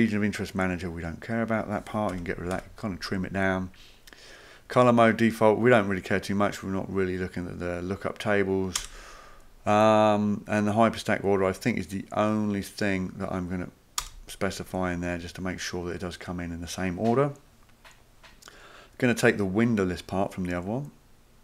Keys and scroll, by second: 2.1 BackSpace, 2.6 BackSpace, 8.8 BackSpace, 14.0 BackSpace.